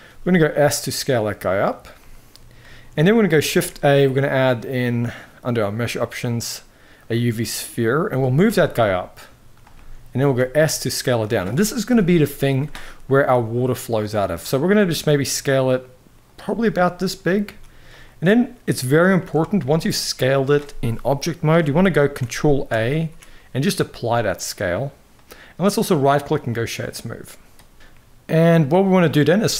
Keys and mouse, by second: 1.7-2.1 middle drag, 2.3 shift+middle click, 2.7 middle click, 3.2 shift+a, 7.8 g, 9.5 shift+middle drag, 9.9 s, 11.6 KP_1, 13.0 g, 14.5 s, 17.2 s, 18.9 shift+middle click, 22.4 ctrl+a, 25.6-26.3 right drag, 27.7 alt+a, 27.7 middle click, 28.8 click, 29.1-29.5 shift+middle drag.